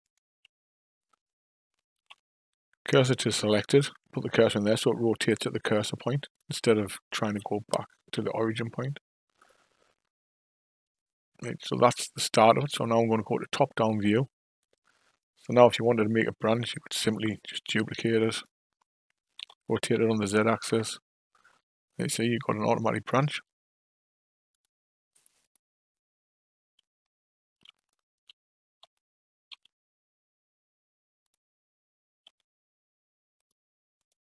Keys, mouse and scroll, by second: 1.9 shift+s, 4.9 r, 7.2 g, 12.4 KP_5, 12.6 KP_7, 15.9 shift+click, 16.4 shift+click, 17.5 shift+d, 19.4 r, 23.1 g, 25.4 click, 27.7 shift+click, 28.8 r, 32.2 g, 33.9 click.